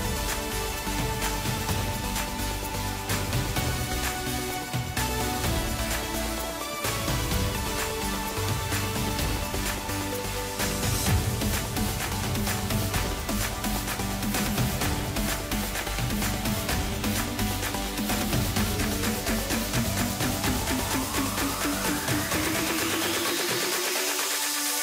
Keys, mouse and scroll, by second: 3.2-3.9 drag, 5.2-5.7 drag, 5.7-6.8 middle drag, 6.8 KP_1, 8.0 click, 8.3-8.9 scroll up 1, 8.9 Tab, 10.9 click, 11.8 1, 12.4 click, 13.9 click, 15.0 g, 18.6 g, 22.2 scroll down 1, 22.4-24.8 middle drag.